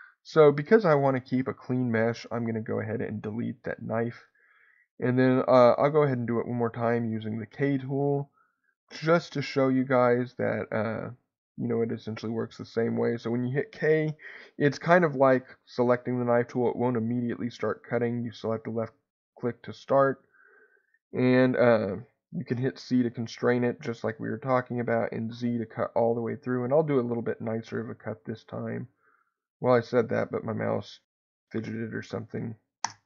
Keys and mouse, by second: 1.3 ctrl+z, 1.6 ctrl+z, 4.1 click, 4.8 click.